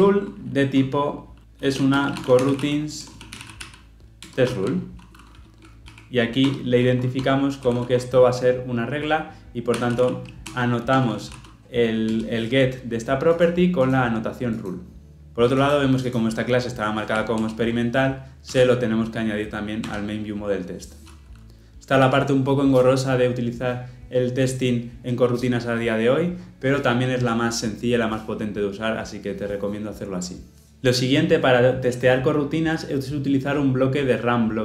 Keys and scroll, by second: 4.2 Return, 12.1 Return, 17.3 alt+Return.